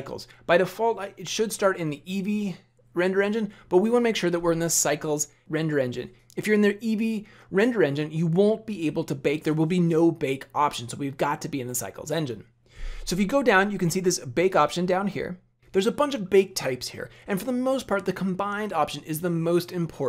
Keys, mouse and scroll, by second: 14.5 click.